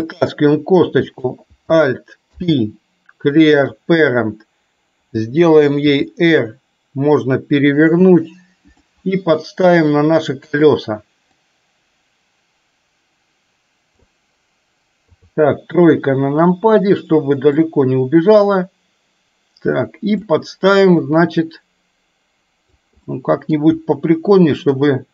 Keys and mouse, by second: 1.3 click, 2.4 alt+p, 5.9 r, 9.1-10.8 drag, 11.6-14.3 drag, 15.2 KP_3, 17.7-20.3 drag, 21.2-22.8 drag, 23.1 middle click, 24.9-25.1 drag.